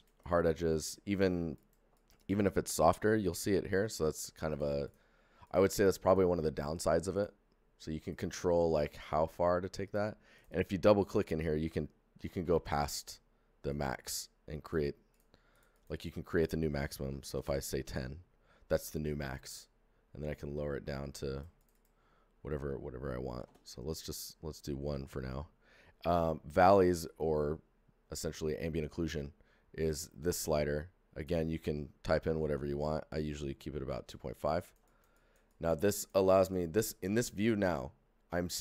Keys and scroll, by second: 12.1 alt+KP_5, 12.4 Return, 17.1 KP_1, 17.3 KP_0, 17.4 Return, 22.4 ctrl+a, 23.3 a, 23.4 KP_1, 23.4 Return.